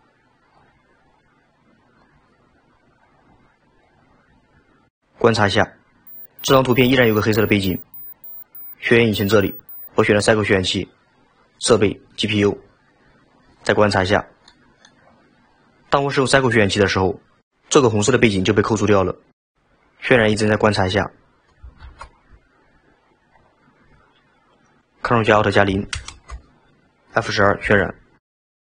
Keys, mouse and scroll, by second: 0.1-3.6 drag, 9.1 click, 9.9-13.5 drag, 13.5-14.1 scroll up 3, 14.5-15.1 middle drag, 15.1 click, 21.0-21.8 scroll down 1, 21.8 shift+a, 26.0 ctrl+alt+KP_0, 27.9 F12.